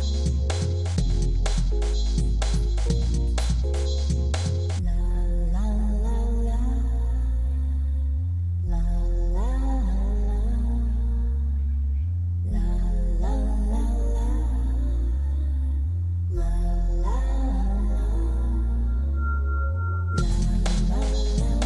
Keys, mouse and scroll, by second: 0.2-2.6 middle drag, 6.1-7.9 drag, 12.8 click, 13.2-13.8 drag.